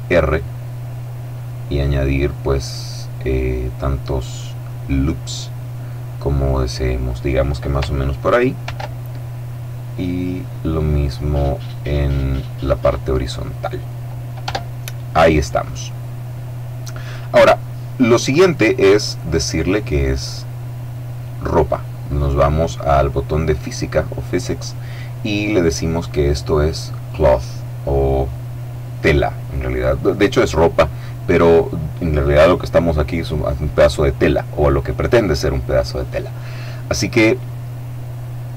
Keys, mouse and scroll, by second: 0.7-2.6 scroll up 2, 2.8-3.5 scroll up 2, 4.1-5.6 scroll up 2, 6.3 click, 8.5 ctrl+r, 9.8-11.4 scroll up 2, 11.5-12.0 scroll up 2, 12.7 click, 14.3 Tab, 18.7-20.4 middle drag, 23.5 click, 26.5 click.